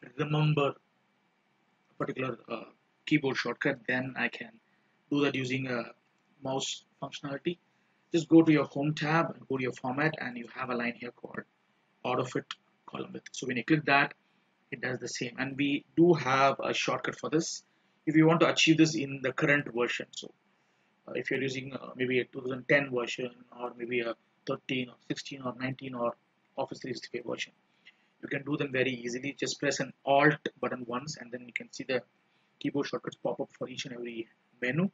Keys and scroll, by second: 3.5 ctrl+z, 16.8 ctrl+z.